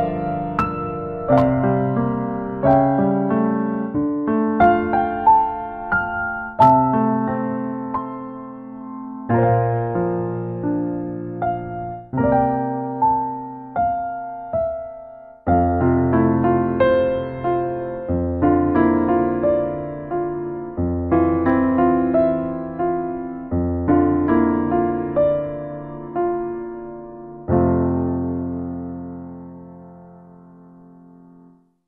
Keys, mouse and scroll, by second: 0.1 middle click, 0.5 ctrl+middle click, 1.1 ctrl+right click, 1.8 shift+right click, 2.3 right click, 2.8 f, 3.1 click, 4.2 ctrl+click, 4.8 click, 5.3 click, 5.4 ctrl+click, 6.7 click, 7.5 middle click, 7.7 middle click, 7.9 right click, 8.4 click, 11.0 click, 11.2 click, 12.8 f, 13.2 click, 14.3 right click, 15.8 click, 15.9 click, 17.0 middle click, 17.6 middle click, 18.0 right click, 18.4 click, 19.8 ctrl+middle click, 21.1 ctrl+middle click, 21.8 middle click, 22.7 ctrl+middle click, 23.2 shift+middle click, 23.6 ctrl+right click, 24.1 right click, 24.8 f, 25.1 click, 26.9 middle click, 27.5 ctrl+right click, 27.8 right click, 28.6 click, 29.4 f, 29.7-31.8 click.